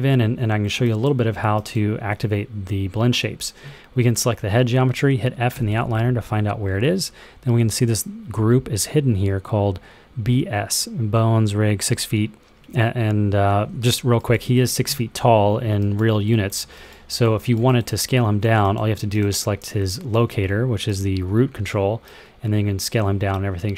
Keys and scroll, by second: 5.4 f, 20.1 r, 21.5 r.